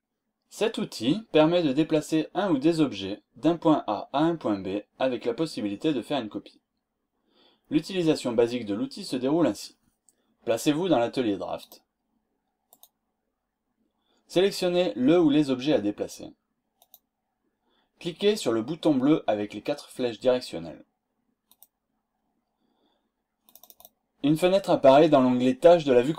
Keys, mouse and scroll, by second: 11.6 click, 12.6 click, 16.8 click, 23.5 click.